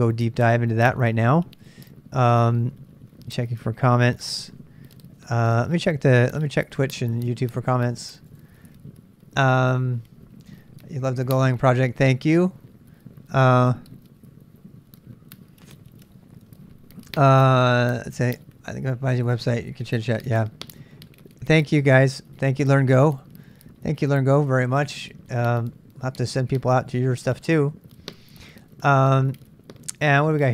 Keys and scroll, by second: 2.2 super+Tab, 5.2 super+Tab, 5.4 super+Tab.